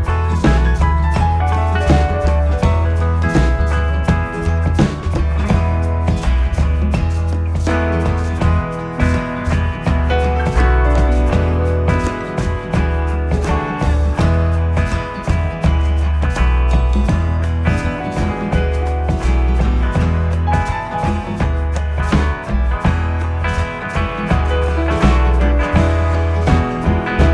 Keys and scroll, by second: 2.5 ctrl+F1, 2.9 1, 4.0 9, 5.7 ctrl+d, 5.8 Escape, 7.4 ctrl+d, 7.6 Escape, 12.4 p, 13.5 p, 15.7 9, 15.8 Return, 25.6 ctrl+d, 25.8 Escape, 26.0 ctrl+F1.